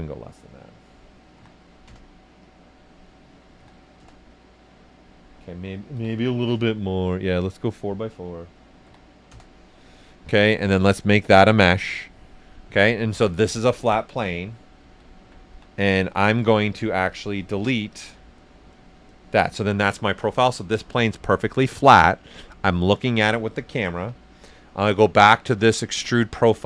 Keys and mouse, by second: 1.3 3, 1.8 Return, 2.4 click, 3.6 3, 4.0 Return, 5.9 4, 6.4 Return, 7.4 click, 8.8 4, 9.3 Return, 11.2 click, 12.6-14.8 right drag, 14.5-17.0 typing, 17.9 click, 23.9 b, 26.1 typing, 26.2 click.